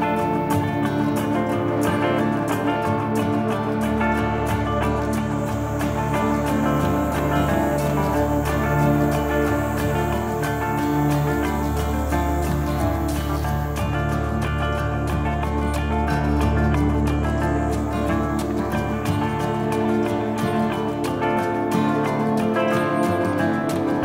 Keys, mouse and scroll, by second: 3.3 click, 7.3-7.8 scroll up 2, 7.8 Tab, 10.0 w, 14.6 Tab, 15.7 scroll down 2, 18.6 click, 21.6 middle click, 23.3 shift+d.